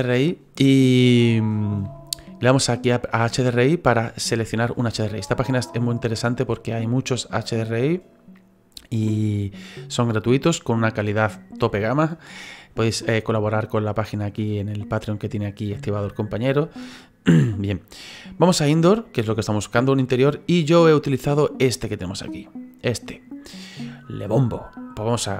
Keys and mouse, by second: 3.9 click, 19.6 click, 25.0 click.